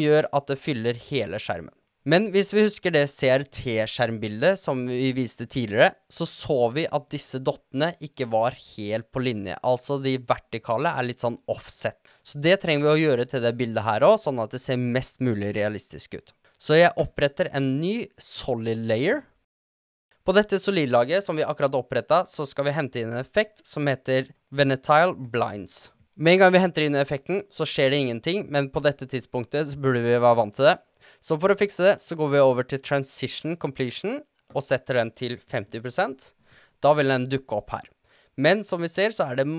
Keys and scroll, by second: 19.2-20.5 typing, 23.2-24.8 typing, 34.2-35.1 typing.